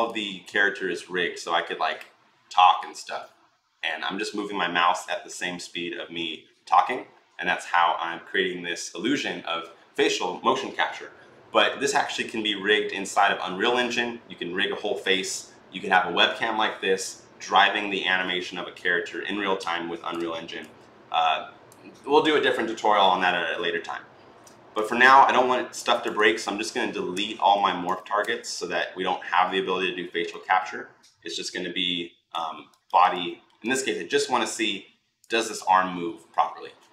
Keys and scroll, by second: 27.0 Delete, 28.0 Delete.